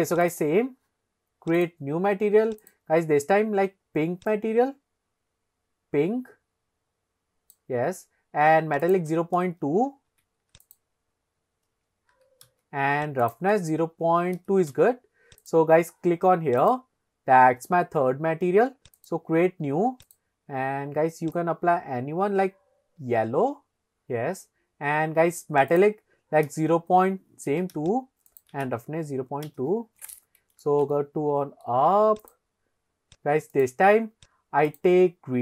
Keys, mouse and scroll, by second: 0.3 click, 1.6-2.0 drag, 2.6 click, 8.9-13.0 drag, 13.3-14.8 drag, 15.5 click, 16.6 click, 19.0 click, 20.1 click, 25.7-28.3 drag, 28.6-29.7 drag, 31.4 shift+middle click, 32.4 click, 33.6-34.2 drag, 34.7 click.